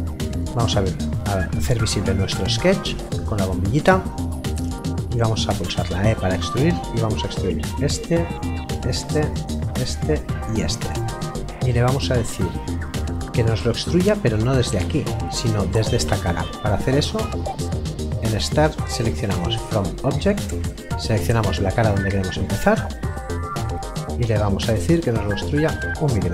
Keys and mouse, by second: 5.9 e, 7.2 click, 11.2 middle click, 13.1 click, 19.5 click.